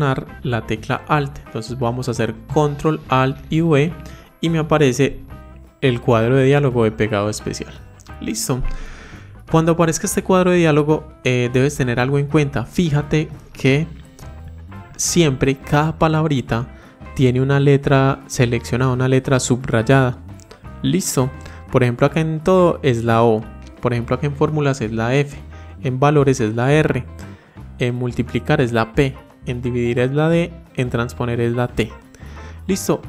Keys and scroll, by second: 3.2 ctrl+alt+v.